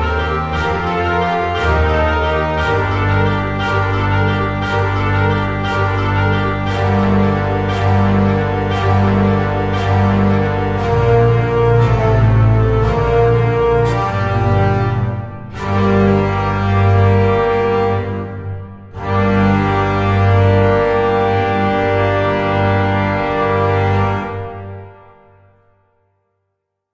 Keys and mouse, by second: 0.0 middle click, 1.3 middle click, 1.4 g, 1.5 x, 3.3 click, 3.8 KP_1, 4.0 click, 4.8 click, 5.2 shift+d, 5.8 click, 6.0 middle click, 6.1 g, 6.2 y, 7.5 click, 7.6 KP_1, 9.3 click, 9.6 g, 11.4 click, 11.7 x, 12.8 click, 13.5-16.1 typing, 14.3 click, 14.5 middle click, 15.6 right click, 17.8 click, 17.9-20.4 typing, 18.5 click, 20.2 click, 20.9 click, 21.6 ctrl+a, 21.8 click, 22.2 shift+d, 23.2 click, 24.1 click, 25.2 click, 25.8 click, 26.0 g, 26.2 click, 26.6 shift+d.